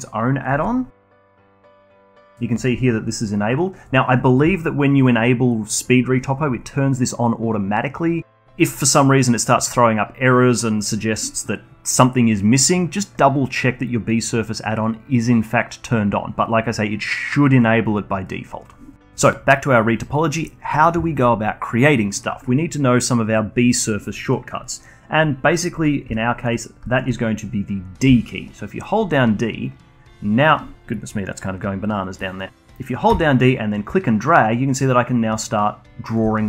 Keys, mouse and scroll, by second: 20.7 middle click, 24.3 middle click, 26.1-28.0 alt+drag, 28.0-33.0 d, 33.5-36.2 drag, 36.2 d.